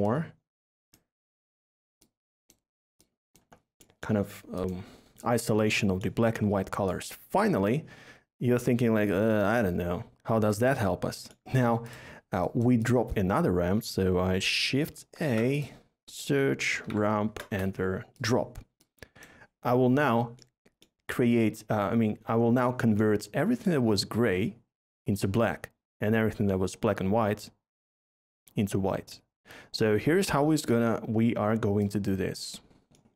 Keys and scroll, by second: 15.0 a, 16.6 typing, 17.3 Return, 19.2 typing.